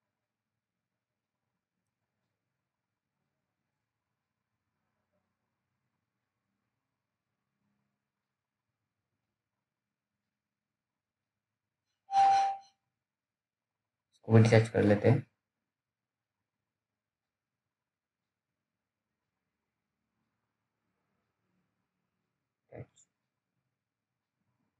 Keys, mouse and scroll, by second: 0.6-0.9 scroll up 1, 1.0 alt+middle click, 5.2 click, 8.4 alt+middle click, 10.6 click, 13.9-14.5 scroll down 1, 14.6 scroll down 1, 18.2 click, 19.5 scroll down 1, 19.9 alt+middle click, 20.5 alt+scroll up 1, 20.8 click, 23.8-24.2 scroll down 1, 24.4 right click.